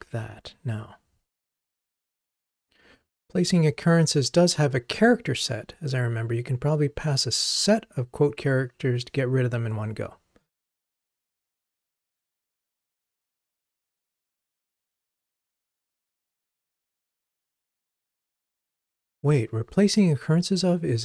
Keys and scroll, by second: 11.8 shift+super+d.